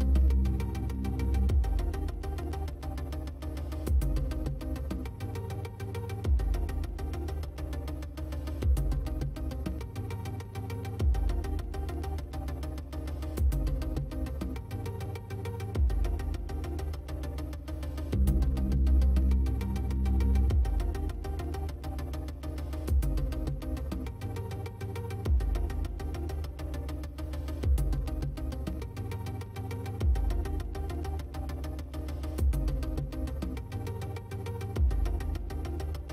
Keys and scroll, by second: 2.6 space, 9.1 space, 15.9 space.